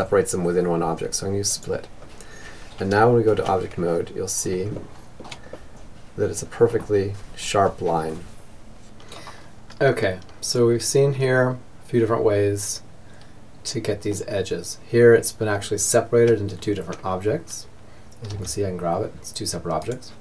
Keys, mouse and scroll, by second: 1.1 Tab, 1.8 Tab, 2.4-4.0 middle drag, 5.4 middle click, 9.0-10.9 middle drag, 15.3 Tab, 16.0 Tab, 17.3 g, 19.8-20.2 middle drag.